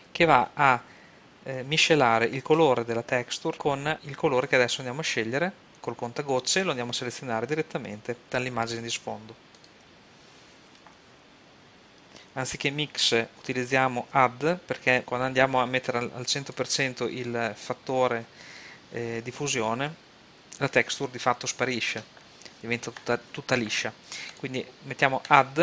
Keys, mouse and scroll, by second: 4.0-5.6 drag, 13.1-14.8 drag, 15.0-16.7 drag, 24.3-25.6 drag.